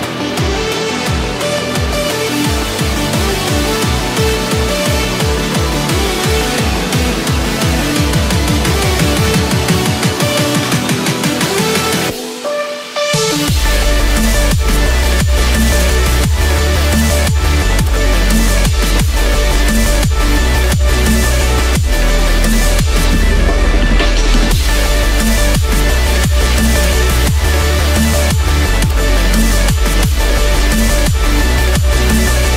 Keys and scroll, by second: 2.0 ctrl+-, 3.1 ctrl+-, 3.6 ctrl+=.